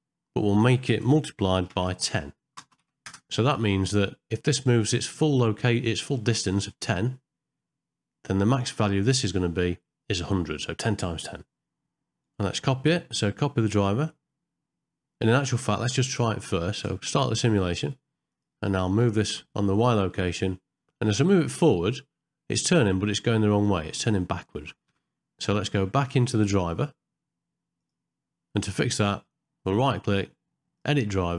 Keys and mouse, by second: 12.4-15.3 right drag, 17.0 space, 18.3 click, 19.0 g, 25.0 shift+Left, 27.8 click, 29.7-31.3 right drag.